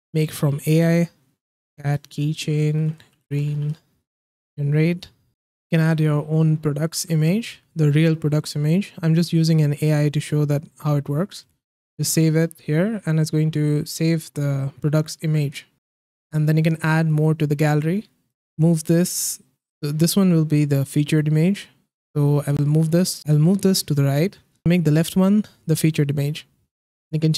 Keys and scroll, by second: 1.2-4.1 typing.